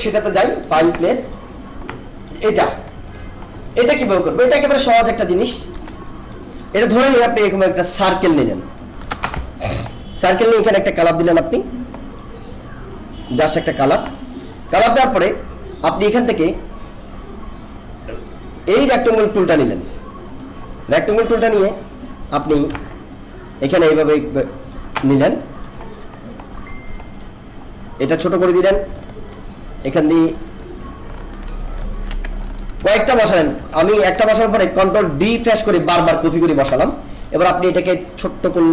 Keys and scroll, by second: 22.7 ctrl+z, 32.8 ctrl+d.